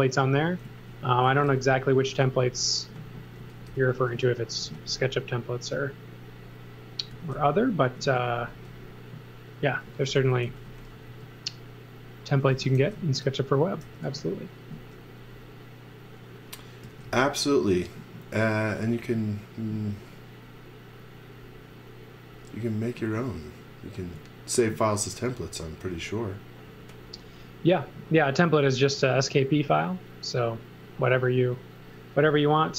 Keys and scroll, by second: 0.6-4.6 typing, 6.9-8.5 typing, 9.6-11.0 typing, 12.8 shift+1, 13.8 n, 16.6-17.5 typing, 18.8 space.